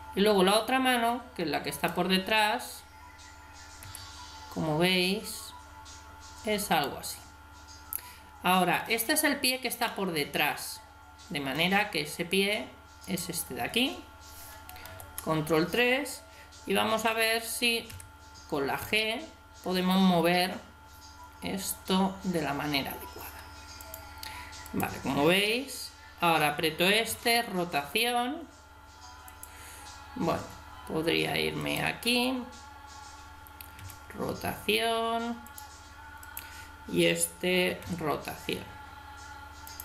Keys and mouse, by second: 0.5 right click, 3.8 g, 9.9-11.6 middle drag, 14.9 ctrl+KP_3, 17.9 g, 24.7 right click, 27.1 r, 31.6 right click, 33.8 r, 36.2 click, 37.8 r.